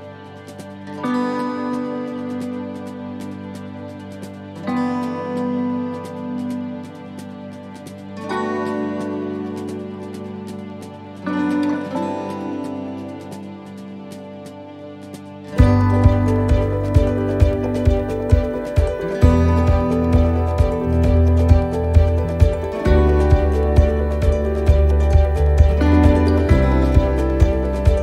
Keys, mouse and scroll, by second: 1.7 click, 4.2 middle click, 5.5 click, 8.2 s, 10.6 middle click, 11.3 shift+middle click, 11.6-12.0 scroll up 3, 12.0 middle click, 13.7 s, 16.7 s, 19.4 middle click, 19.7-20.1 scroll down 3, 20.2 middle click, 22.8 scroll down 2, 23.7 click, 25.9 middle click, 26.3 scroll down 1, 26.7 shift+middle click, 27.3 middle click, 27.9 shift+middle click.